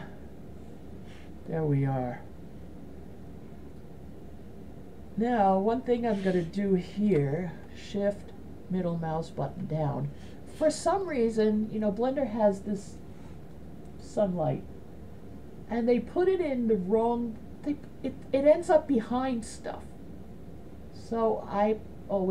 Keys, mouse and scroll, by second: 7.9-9.5 shift+middle drag, 11.4 right click, 18.3-20.7 drag.